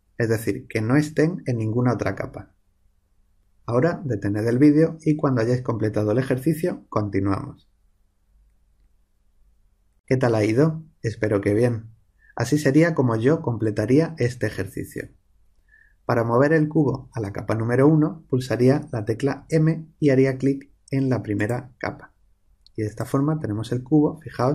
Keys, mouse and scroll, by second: 19.3 m.